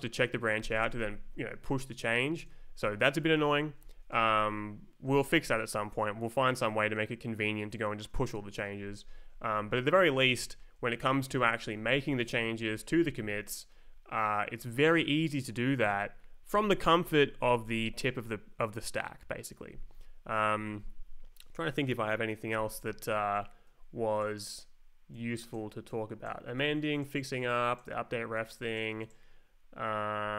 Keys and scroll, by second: 0.8 space, 3.2 Escape, 3.8 Down, 4.1 space, 9.2 Right, 9.6 Down, 10.8 Up, 11.6 Down, 13.6 Up, 22.5 ctrl+n.